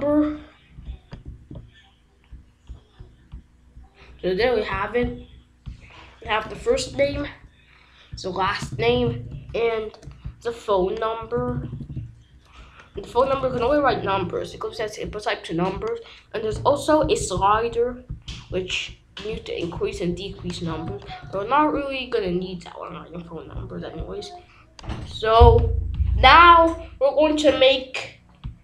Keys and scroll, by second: 1.2 ctrl+s, 5.9-6.9 typing, 8.3-9.3 typing, 11.0-14.0 typing, 20.8 ctrl+a, 21.1 BackSpace.